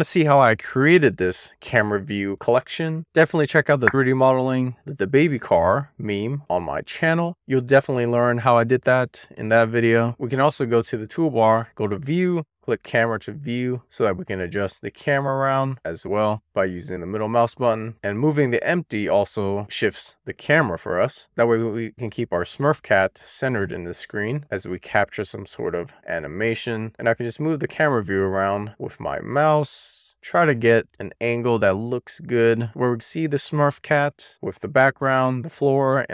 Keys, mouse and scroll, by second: 10.3 n, 11.7 click, 12.6 click, 13.6 click, 14.5-15.6 scroll down 3, 15.6-16.8 scroll up 1, 16.8-18.0 scroll up 1, 18.0 click, 18.6 click, 23.5 click, 24.3 shift+middle click.